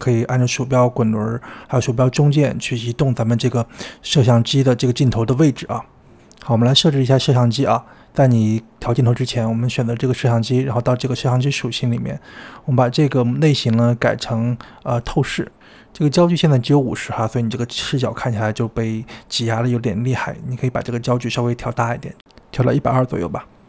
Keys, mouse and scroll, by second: 0.8-3.4 shift+middle drag, 3.4-4.0 scroll down 1, 4.0 shift+middle click, 5.0-5.4 scroll down 1, 5.4-6.4 shift+middle drag, 6.7-7.2 scroll down 2, 7.2 shift+middle click, 8.6-9.2 scroll up 4, 9.2-10.1 drag, 12.9-15.3 drag, 15.5-16.1 scroll down 9, 16.1-17.1 shift+middle drag, 20.2 click, 21.2 click, 22.7-23.2 scroll down 4, 23.2-23.6 shift+middle drag.